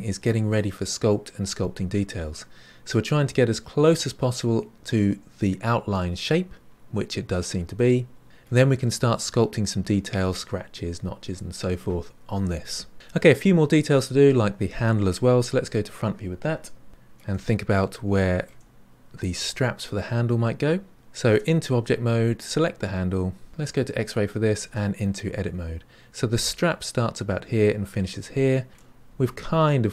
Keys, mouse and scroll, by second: 3.2-8.2 middle drag, 15.6 KP_1, 16.9 shift+middle click, 17.3-18.1 scroll up 4, 18.1-20.9 shift+middle drag, 21.3 Tab, 22.3 click, 24.1 click, 24.6 Tab, 28.7 shift+middle click, 29.4 scroll up 3.